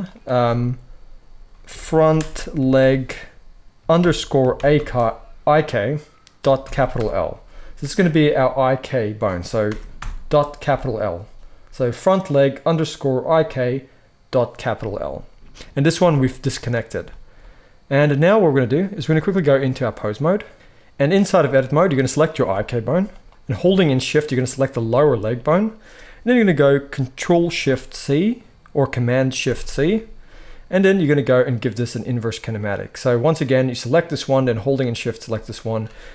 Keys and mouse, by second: 0.0-20.5 drag, 15.8 g, 20.5 ctrl+z, 20.5 alt+a, 20.5-21.9 middle drag, 21.9-22.4 drag, 22.4-24.2 middle drag, 22.4 g, 24.2 shift+click, 24.3-25.0 shift+middle drag, 29.3 ctrl+shift+c, 34.7 shift+click, 35.3 shift+click.